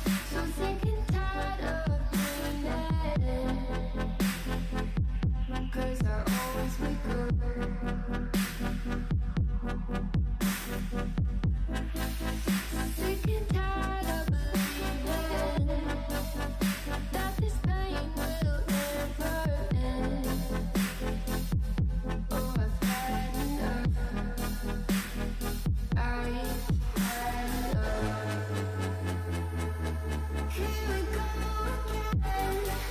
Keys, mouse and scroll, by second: 0.7 g, 2.1 scroll down 1, 2.3 middle click, 2.7 KP_1, 3.0-3.4 scroll down 4, 3.4 shift+middle click, 3.6 s, 4.4 s, 5.6 s, 6.4 s, 7.4 click, 9.3 click, 10.7 g, 12.9 scroll down 3, 13.1 g, 14.7 shift+middle click, 14.9-15.9 scroll up 8, 15.2 shift+middle click, 15.9 g, 17.2 shift+middle click, 17.7 scroll down 4, 17.8 shift+middle click, 18.6 alt+z, 18.8 click, 19.2 alt+z, 19.4 click, 20.2 x, 21.0-21.3 scroll down 3, 21.3-22.7 middle drag, 23.8 a, 24.2-24.9 shift+middle drag, 24.9-25.3 scroll down 2, 25.3 shift+middle click, 25.4-25.8 scroll up 2, 25.8 shift+d, 26.7 click, 27.1 r, 28.3 KP_3, 28.6 shift+middle click, 29.3 g, 30.7 s.